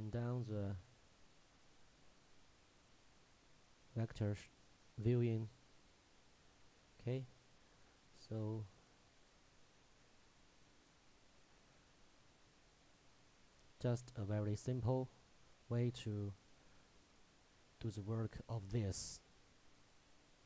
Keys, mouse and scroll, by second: 0.1 click, 3.1-3.7 scroll down 1, 3.7 middle click, 4.4-4.7 scroll up 1, 7.4 shift+middle click, 8.1-8.4 scroll down 1, 8.4 shift+middle click, 9.5-9.9 scroll down 1, 10.2 shift+middle click, 11.8 shift+scroll up 1, 12.4-13.1 scroll up 1, 13.1 middle click, 13.3-13.7 scroll down 1, 13.7 middle click, 15.3 shift+middle click.